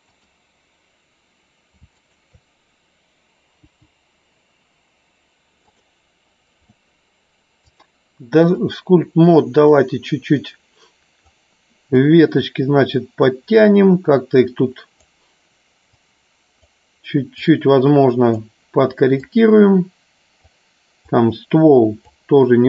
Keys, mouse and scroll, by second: 2.0 shift+click, 3.7 Delete, 5.5 click, 7.7 click, 9.8-11.3 drag, 12.2-13.5 drag, 14.3 click, 16.1 click, 17.7-18.8 drag, 19.3-20.4 drag, 21.2 click.